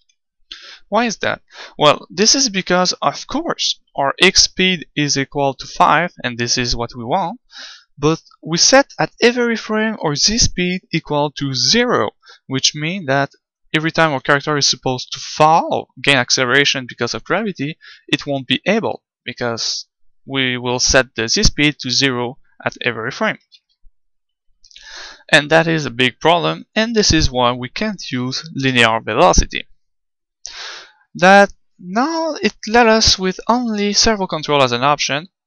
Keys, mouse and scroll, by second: 13.5-16.6 drag, 23.5 ctrl+z, 24.6 ctrl+z.